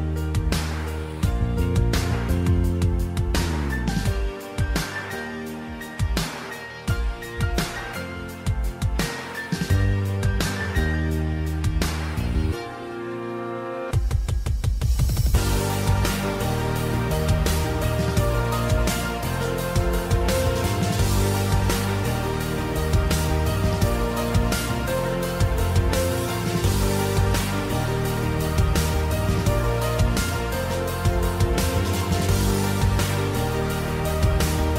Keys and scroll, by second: 8.8 BackSpace, 8.9 Return.